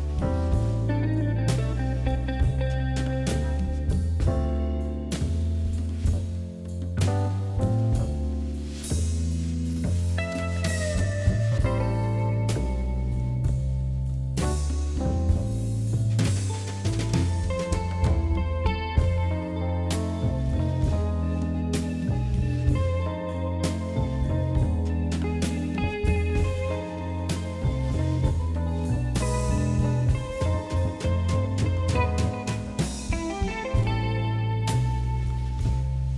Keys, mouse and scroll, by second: 0.1 g, 2.2-3.2 shift+middle drag, 3.2 e, 4.0 ctrl+z, 4.2 ctrl+z, 4.8 ctrl+shift+z, 5.2 click, 7.2 e, 9.4 r, 10.6 click, 10.8 r, 11.6 ctrl+z, 11.8 ctrl+z, 12.5 r, 13.6 click, 13.9 g, 14.9 click, 15.2 g, 16.4 shift+click, 16.9 e, 18.1 click, 18.6 g, 19.7 click, 20.1 g, 22.4 shift+click, 23.4 e, 24.4 r, 25.2 g, 26.3 click, 26.6 g, 27.4 click, 28.5 shift+middle click, 29.0 click, 29.3 scroll down 3, 29.6 shift+middle click, 29.9 scroll up 1, 30.1 shift+middle click, 30.8 e, 32.5 click, 33.3 g.